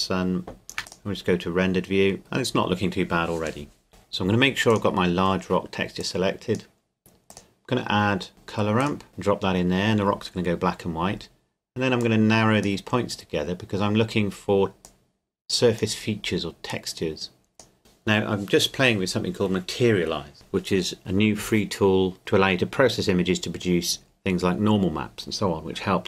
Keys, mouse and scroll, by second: 2.2-2.7 scroll up 2, 2.7-3.8 scroll up 1, 3.8 scroll up 1, 3.9 Delete, 4.7-8.3 drag, 8.8-10.9 drag, 12.0 click, 14.8 click.